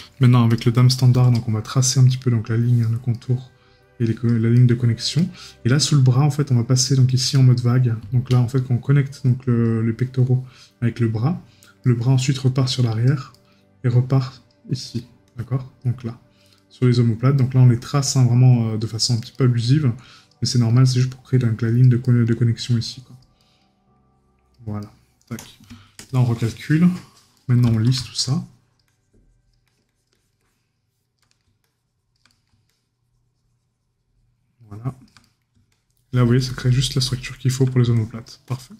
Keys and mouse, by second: 3.1 right click, 4.6 right click, 7.3 right click, 11.8 right click, 13.3 right click, 14.8 right click, 16.6 right click, 19.3 right click, 22.0 right click, 23.4 right click, 24.8 right click, 27.4 right click, 31.2 right click, 35.2 right click.